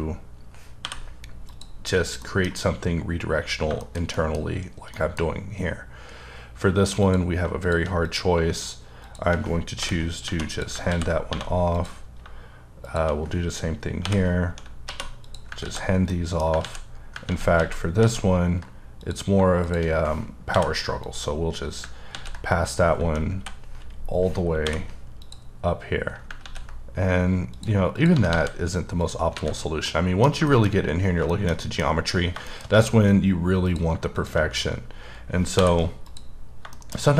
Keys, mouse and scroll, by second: 0.8 m, 1.4 click, 1.9-2.2 scroll down 2, 2.2 middle click, 3.4 scroll down 3, 3.8 shift+middle click, 4.9 middle click, 5.2-5.9 scroll up 4, 5.9-7.0 scroll down 2, 7.0 click, 7.6 click, 8.0 click, 9.0 shift+click, 9.8-10.2 typing, 10.5 click, 10.9 ctrl+x, 11.3 1, 11.7 click, 14.0-14.8 typing, 15.2 click, 15.6 ctrl+x, 15.8 scroll down 1, 16.0 scroll up 1, 16.1 middle click, 16.6 ctrl+z, 16.9 scroll up 2, 17.5 ctrl+z, 18.2 ctrl+z, 19.0 click, 20.5 m, 21.0 click, 22.2 ctrl+z, 23.0 j, 23.4 n, 25.2 click, 26.5 z, 27.5 click, 27.9 click, 28.1 g, 28.3 g, 29.0 click, 29.3 alt+a, 29.5-29.8 alt+scroll down 1, 29.8 middle click, 30.8-31.3 scroll up 2, 31.3 shift+middle click, 31.8-32.5 scroll up 3, 32.5 shift+middle click, 33.0 scroll up 3, 33.6 click, 34.6-35.6 scroll down 2, 35.6 m, 36.1 click, 36.4-36.7 scroll down 1, 36.7 shift+middle click, 37.0-37.1 scroll down 2.